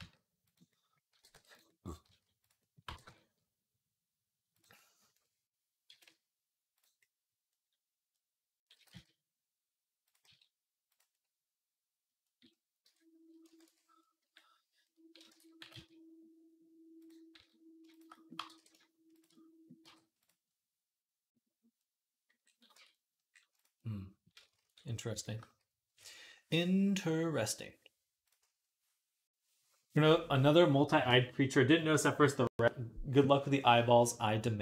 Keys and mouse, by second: 0.6-6.8 drag, 1.0 g, 1.9 s, 2.7 g, 7.0-13.1 drag, 8.6 g, 10.1 s, 12.7 Tab, 13.1 ctrl+middle click, 13.5 ctrl+s, 14.0-15.1 middle drag, 15.1 Tab, 15.4 g, 17.2 s, 18.0-22.6 drag, 18.2 g, 19.7 g, 22.6 Tab, 23.3 click, 23.4 click, 24.5 ctrl+s, 25.6-28.8 drag, 28.8-34.6 middle drag.